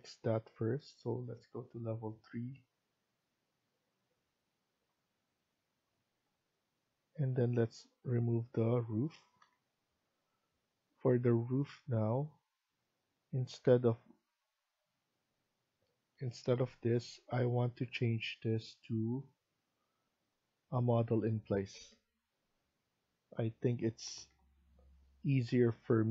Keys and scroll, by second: 9.3 Delete.